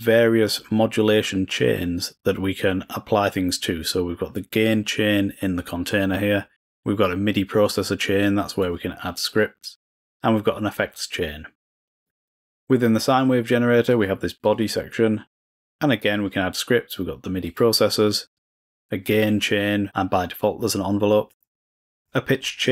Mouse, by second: 0.5 click, 1.2 click, 8.6 click, 9.2-9.8 drag, 11.9 drag, 12.2 click, 13.9 click, 14.4 click, 16.1 click, 17.4 click, 18.3 click, 21.5-21.8 drag, 22.0-22.5 drag.